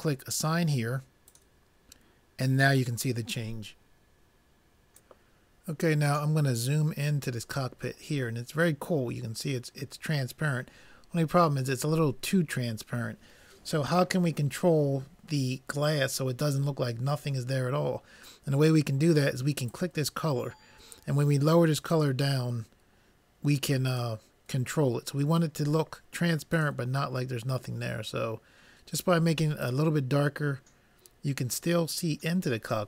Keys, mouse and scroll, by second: 1.4-3.1 drag, 7.1 middle click, 8.2 middle click, 10.1 middle click, 10.4 middle click, 12.1 middle click, 20.6-21.8 drag.